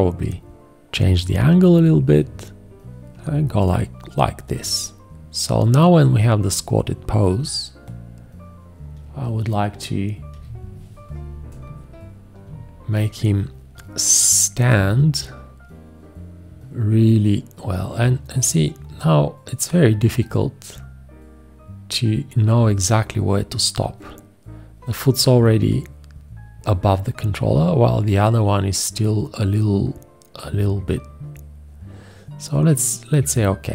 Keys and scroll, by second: 10.4 x.